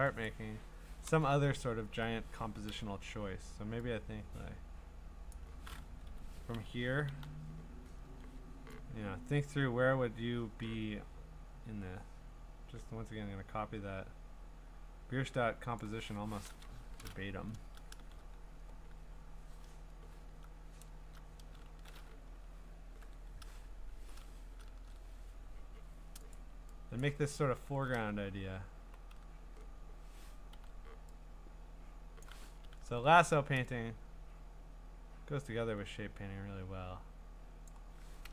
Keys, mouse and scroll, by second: 0.2 click, 1.4-2.0 ctrl+scroll, 5.1 i, 5.3 click, 6.1 Escape, 7.1 l, 8.0 l, 9.2 click, 15.8 click, 21.0 alt+BackSpace, 21.7 ctrl+d, 22.9 ctrl+i, 23.9 Escape, 24.6 ctrl+shift+u, 26.3 click, 27.4-27.9 scroll, 28.8 b, 30.5 l, 32.2 click, 32.8 ctrl+d, 37.7 click.